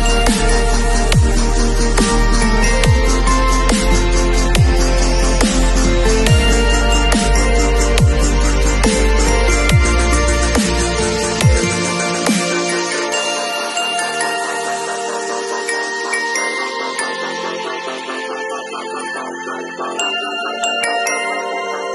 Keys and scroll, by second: 0.8 super+j, 3.9 super+t, 9.5 super+t, 13.0 super+e, 16.1 super+j.